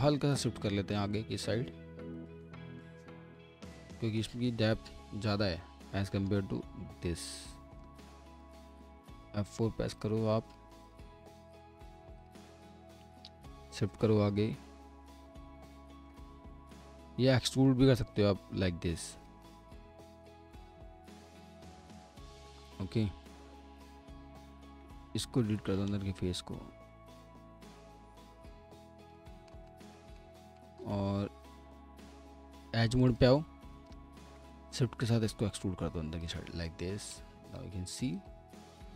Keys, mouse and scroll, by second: 2.4 middle click, 3.5-3.9 scroll down 1, 3.9 middle click, 6.5-7.3 typing, 7.1 scroll up 1, 7.4 alt+middle click, 9.0 F4, 9.9 ctrl+click, 12.6 middle click, 15.3 alt+middle click, 16.3-16.7 scroll up 1, 16.7 ctrl+z, 17.1 alt+middle click, 18.1 shift+l, 19.5 middle click, 22.8 scroll up 1, 24.2 scroll up 1, 24.4 ctrl+click, 24.5 ctrl+double click, 25.4 Delete, 29.7 alt+middle click, 32.6 2, 33.1 click, 34.0 r, 34.7 shift+click, 38.6 scroll down 1.